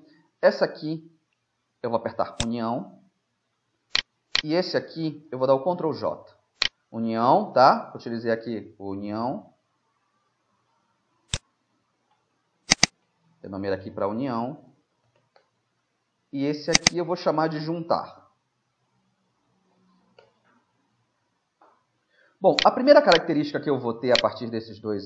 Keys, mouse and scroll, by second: 2.4-4.3 drag, 3.2-4.4 middle drag, 4.1 right click, 5.1 right click, 5.7 ctrl+j, 11.4-14.7 drag, 16.8-18.9 drag, 19.1 BackSpace.